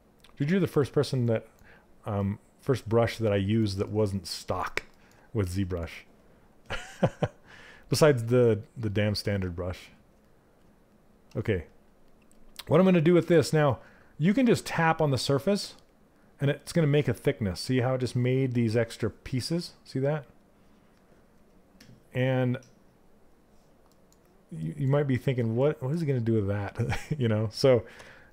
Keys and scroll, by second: 2.3 s, 5.0 s, 8.9 s.